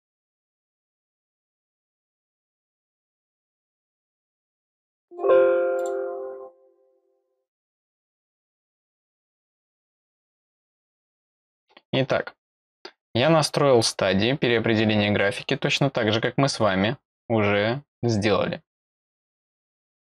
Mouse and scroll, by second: 0.4 click, 0.8 click, 0.9 click, 1.2 click, 1.4 click, 1.8 click, 3.5 click, 4.3 click, 4.7 click, 5.0 click, 5.7 click, 7.8 click, 10.0 click, 12.6 click, 13.8 click.